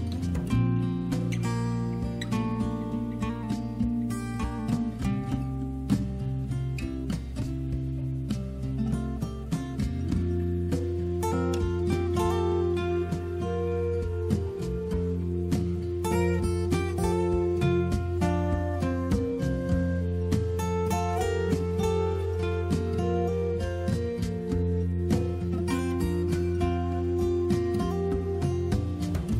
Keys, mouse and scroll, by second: 3.8 click, 5.1 click, 6.8 click, 7.7 click, 12.4-13.4 typing, 14.9 click, 16.4 click, 19.1 click, 19.9 click, 21.2 click, 22.8 click, 23.8 click, 27.0 click.